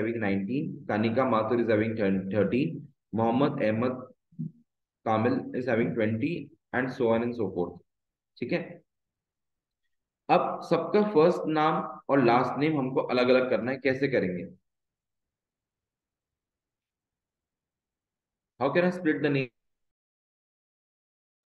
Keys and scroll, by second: 0.7 Down, 7.2 Down, 8.2 Up, 9.2 Up, 9.7 Down, 10.2 Up, 11.7 shift+Down, 13.2 Delete, 14.2 Right, 14.7 Left.